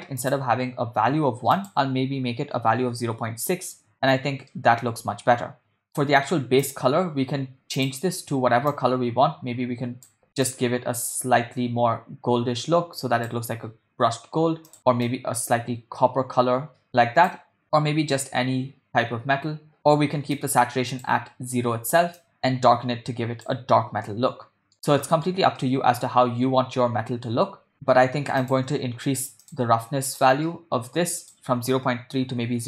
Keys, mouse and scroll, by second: 0.3 click, 4.6-5.9 middle drag, 6.6 click, 7.8 click, 14.7 click, 24.1-24.7 middle drag, 24.8-25.3 middle drag, 25.6-27.3 middle drag, 28.4 middle click, 28.5 click, 29.5 click, 30.1 click.